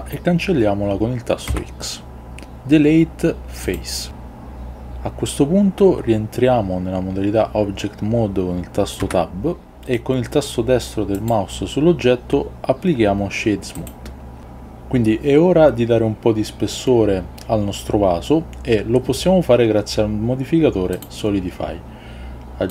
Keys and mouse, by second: 1.6 x, 9.1 Tab.